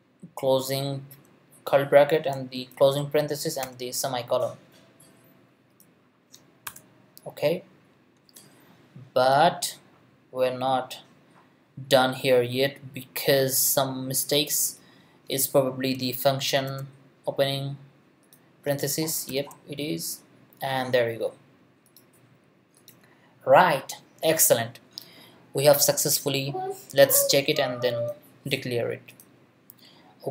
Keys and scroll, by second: 0.8 shift+], 2.7 shift+0, 3.6 shift+;, 6.7 BackSpace, 16.6 shift+9, 19.3 shift+9.